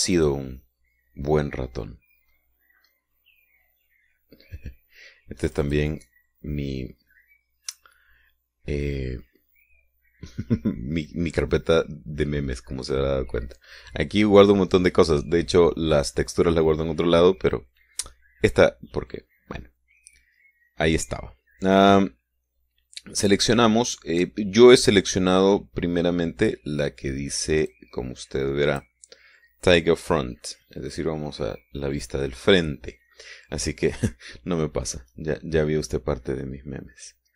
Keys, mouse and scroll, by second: 0.9 click, 3.1-3.5 scroll down 1, 3.9-4.4 scroll down 1, 4.6-6.3 scroll down 1, 6.3 click, 24.1-24.6 scroll down 2, 24.6-28.5 scroll down 1, 28.5-29.9 drag.